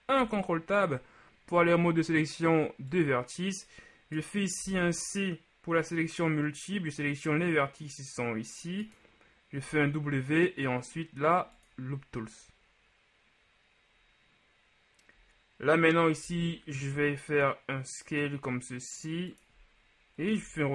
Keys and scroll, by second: 0.3 ctrl+Tab, 4.7 [, 4.9 c, 9.7 w, 16.4 s, 20.5 r.